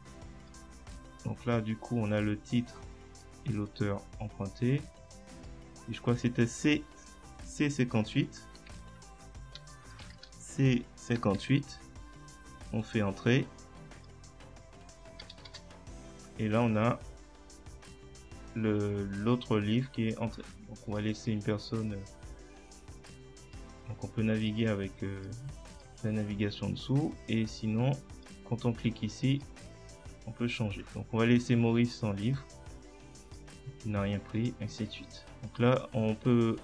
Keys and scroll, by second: 8.8 shift+Tab, 10.0-11.9 typing, 15.5 Return.